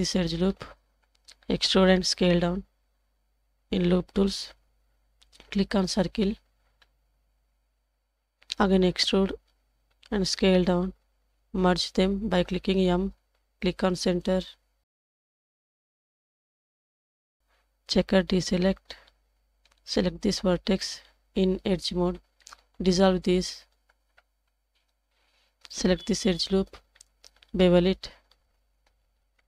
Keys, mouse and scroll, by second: 0.0 alt+click, 2.0 e, 4.5 click, 6.0 click, 6.2-6.8 typing, 9.1 e, 12.2 m, 15.6 alt+click, 16.8 1, 17.5-19.3 drag, 20.2 shift+click, 21.4 2, 23.9 ctrl+x, 26.1 alt+click, 27.5 ctrl+b.